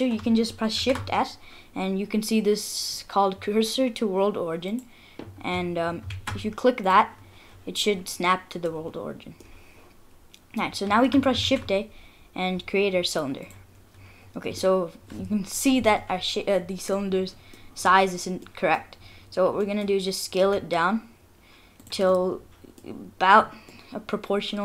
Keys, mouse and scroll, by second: 0.8 shift+s, 6.1 shift+s, 8.3 middle click, 8.7 scroll down 1, 9.4 middle click, 10.8 middle click, 11.4 shift+a, 14.1-15.1 scroll down 5, 14.6 middle click, 16.6-16.9 scroll up 3, 16.9 middle click, 18.2 scroll down 1, 18.4 middle click, 19.2-19.6 scroll down 4, 19.6 middle click, 19.9-20.8 scroll up 3, 20.4 s, 22.1 middle click, 22.6 middle click, 23.0-24.4 scroll up 5, 23.7 middle click.